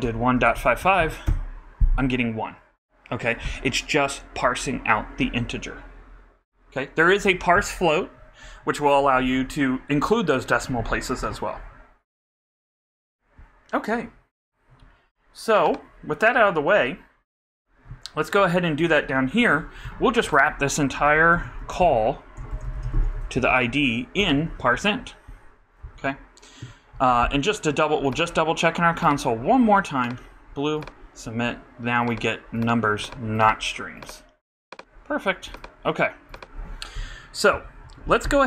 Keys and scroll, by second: 22.2-23.4 typing, 24.1 super+Right, 24.2 super+BackSpace, 24.4 shift+0, 24.7 shift+;.